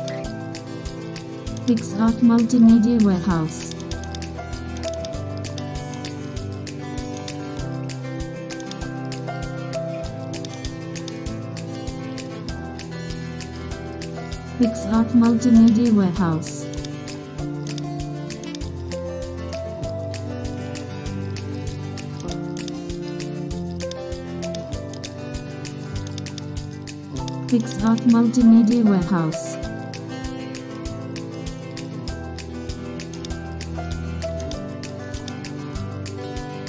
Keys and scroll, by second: 4.3 shift+super+F2, 11.1 alt+shift+s, 11.5 alt+shift+m, 12.0 super+j, 12.3 alt+shift+s, 14.3 alt+shift+n, 15.0 Delete, 15.1 alt+shift+n, 15.3 super+space, 19.6 alt+super+d, 20.5 super+], 23.6 super+space, 26.8 Escape, 34.3 super+j, 35.3 super+c.